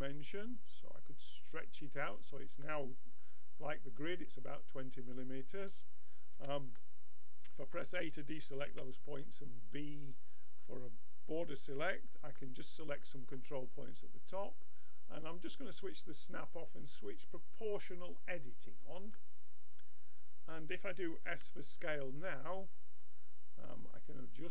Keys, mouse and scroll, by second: 2.7-5.7 middle drag, 6.3 a, 6.8 middle click, 8.7 b, 13.9 middle click, 15.4-18.1 drag, 19.1-21.3 middle drag, 21.3 s.